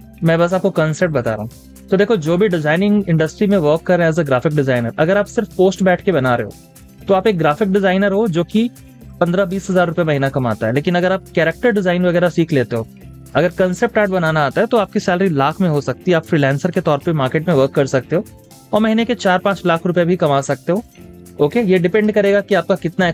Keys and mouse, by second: 17.2 space, 20.0 space.